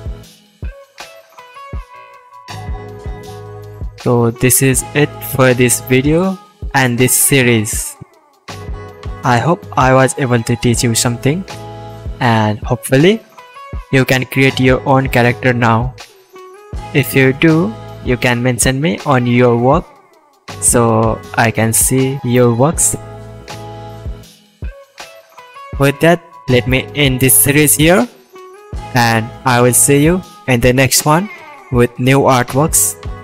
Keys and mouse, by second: 2.7-4.1 middle drag, 4.2-5.0 middle drag, 5.1-12.3 shift+middle drag, 8.8 click, 8.8 right click, 11.3 click, 11.3 right click, 12.5-14.8 middle drag, 17.0-17.6 shift+middle drag, 18.1-18.9 shift+middle drag, 19.7-26.6 middle drag, 28.4-30.7 ctrl+middle drag, 30.4 KP_1, 30.7 KP_5.